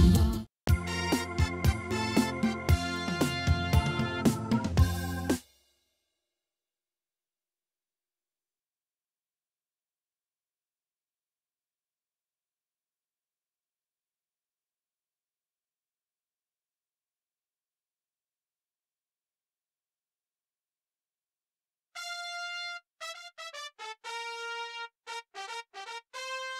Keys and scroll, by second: 0.2 space, 5.3 space.